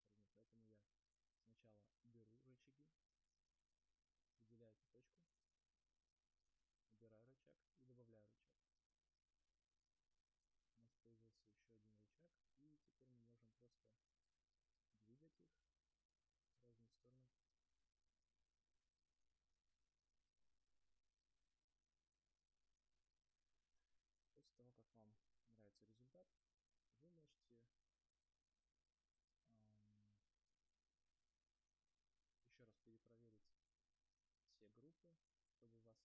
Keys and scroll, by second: 25.5 space.